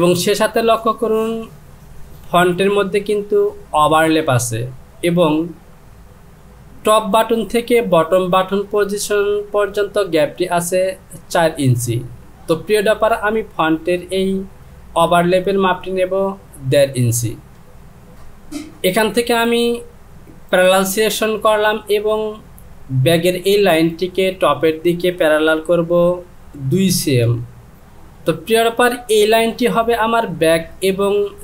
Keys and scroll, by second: 26.7 Down, 27.7 Return.